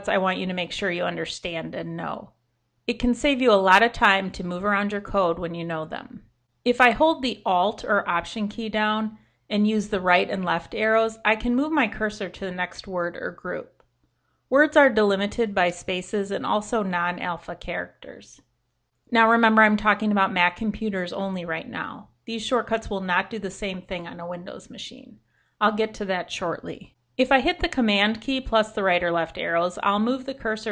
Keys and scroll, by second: 8.8 alt+Left, 9.6 alt+Left, 10.0 alt+Left, 10.4 alt+Right, 10.6 alt+Right, 10.9 alt+Right, 11.3 alt+Right, 11.8 alt+Right, 16.3 alt+Right, 17.1 alt+Right, 18.2 alt+Right, 19.0 alt+Right, 25.9 super+Left, 29.2 super+Right.